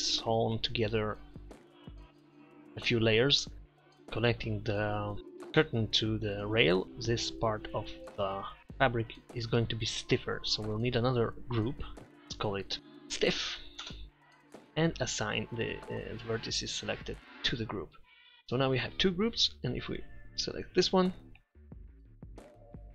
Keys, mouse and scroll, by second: 11.7-12.8 drag, 13.4 f, 17.6 click, 19.8 a.